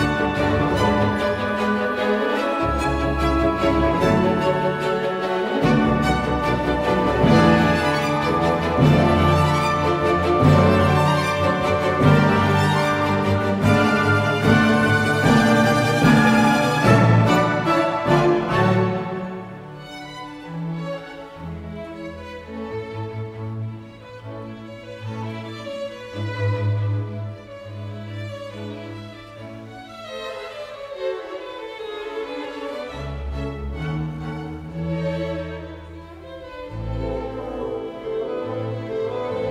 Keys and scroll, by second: 1.9-6.7 typing, 17.7-18.4 typing, 21.2-22.0 typing, 31.4 1, 32.9-33.2 typing, 34.8 0, 36.4 4, 37.2 1, 38.5-39.3 typing.